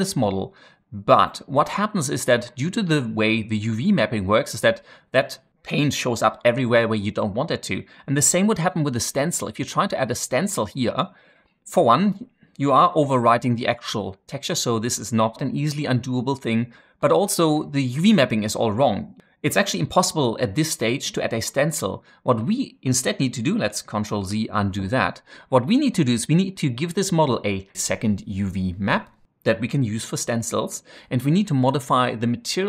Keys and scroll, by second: 23.9 ctrl+z.